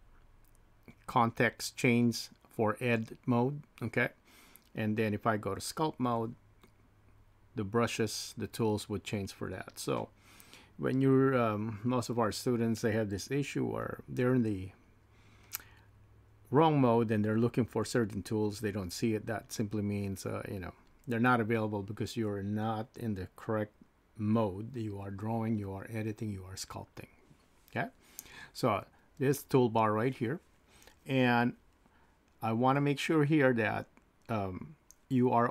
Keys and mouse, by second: 5.1-6.2 drag, 13.8-15.5 drag.